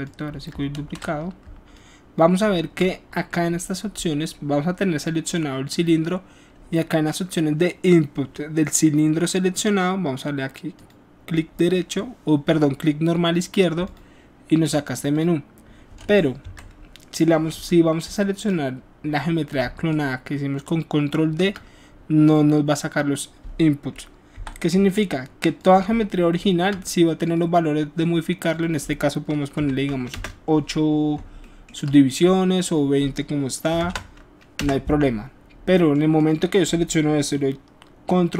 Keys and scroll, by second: 0.7 ctrl+z, 1.4 ctrl+alt+z, 24.5 Delete, 30.0 Return, 33.6 KP_2, 33.7 KP_0, 34.5 Return.